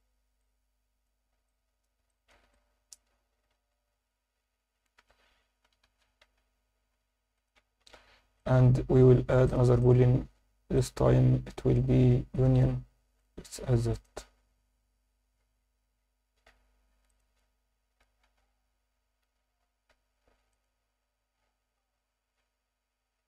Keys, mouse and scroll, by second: 0.4-1.1 alt+middle drag, 1.2 scroll up 1, 1.5 alt+middle click, 2.1-2.4 alt+shift+middle drag, 2.5-3.0 ctrl+alt+middle drag, 3.3 s, 3.5 z, 5.0 Escape, 7.3 shift+click, 7.6 scroll down 2, 7.8 alt+a, 8.4 click, 9.5 drag, 9.8-10.9 drag, 12.6 click, 13.2-16.5 drag, 16.5 scroll up 2, 17.1 click, 18.2 Tab, 18.3-19.0 scroll up 1, 19.0 Tab, 19.9 h, 20.5 click, 21.5 scroll down 2, 21.7 Tab, 22.2-22.8 scroll down 2, 22.7 Tab, 23.1-23.2 scroll up 2.